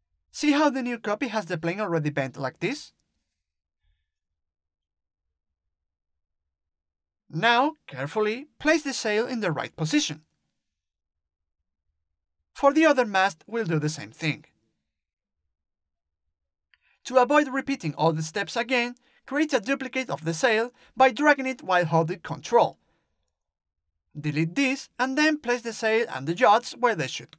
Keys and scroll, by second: 22.5 Delete.